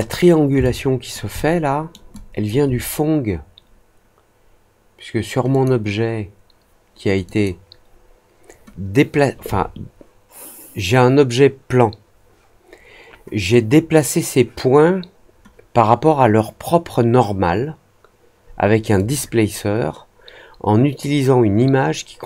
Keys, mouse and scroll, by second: 0.6-1.1 alt+drag, 1.3-1.8 alt+middle drag, 2.1-2.4 alt+drag, 5.4 click, 7.2 click, 18.9 click.